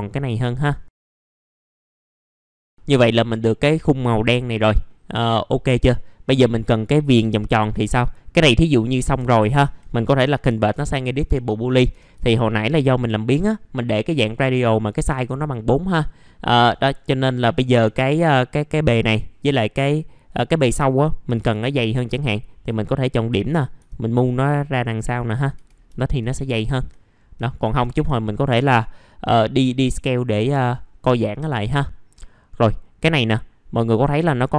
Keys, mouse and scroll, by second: 0.8-2.5 drag, 2.5 middle click, 2.6 scroll down 1, 2.7 middle click, 6.0-7.2 scroll up 1, 7.2 alt+middle click, 9.2 alt+middle click, 11.3 alt+middle click, 12.2-12.6 scroll down 1, 12.8-13.1 scroll up 1, 17.8 middle click, 21.7-22.1 typing, 22.1 scroll down 1, 22.6 click, 23.8 w, 24.4 click, 25.5 1, 25.8 middle click, 26.2-26.5 scroll down 1, 27.0-27.4 scroll down 1, 27.4 alt+middle click, 28.1-28.5 scroll down 1, 28.5 middle click, 28.9 scroll up 1, 32.5 middle click.